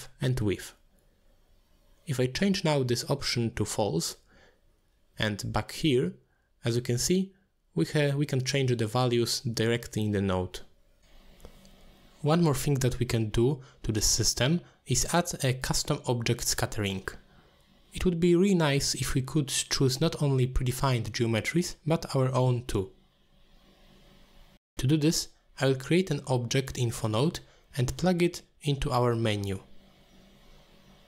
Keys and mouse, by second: 3.0 click, 4.5 click, 5.6 click, 10.0 middle click, 10.7 x, 12.6 middle click, 12.9 middle click, 13.6 n, 15.2 middle click, 16.2 middle click, 18.1 middle click, 18.8 middle click, 19.7 shift+a, 24.1-25.2 drag, 25.7 middle click, 27.8 click, 28.6 n, 30.3 click.